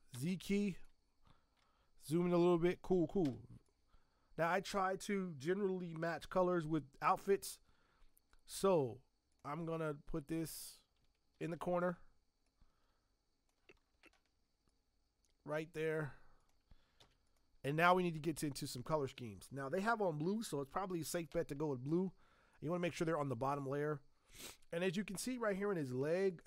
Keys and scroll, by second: 0.1 z, 3.2 v, 11.3 ctrl+t, 17.0 z.